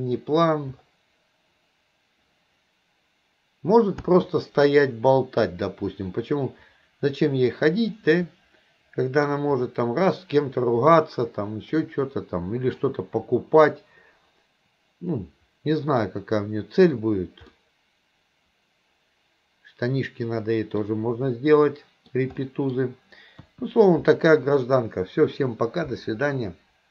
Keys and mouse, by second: 4.1 space, 5.3-7.7 drag, 8.0-9.3 middle drag, 11.8-12.8 middle drag, 15.2-16.1 middle drag, 17.5-20.9 middle drag, 21.7-22.2 middle drag, 22.5-22.8 middle drag, 23.5 KP_1.